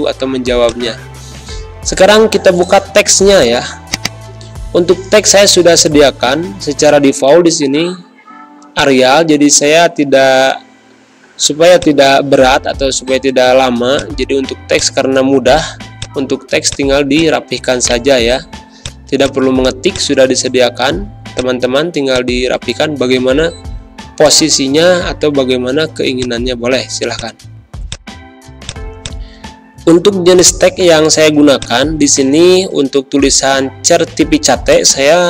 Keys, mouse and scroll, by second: 3.3 click, 6.6 ctrl+z, 8.7 click, 9.7 ctrl+v, 11.7-17.8 shift+drag, 17.8 right click, 18.7 click, 21.0 z, 21.3 click, 21.9 space, 22.0 click, 22.3 space, 24.2-27.1 drag, 34.6 click.